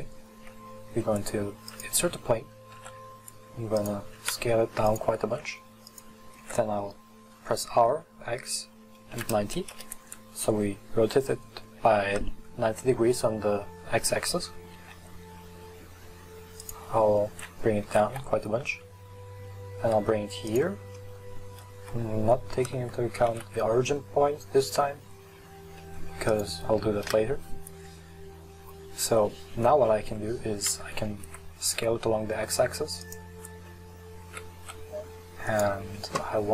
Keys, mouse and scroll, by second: 2.8 s, 4.3 s, 5.3 s, 6.0 click, 6.5 r, 6.7 click, 14.8 s, 18.8 g, 21.1 middle click, 21.8 KP_3, 23.4 g, 27.0 KP_1, 30.1 s, 34.3 s.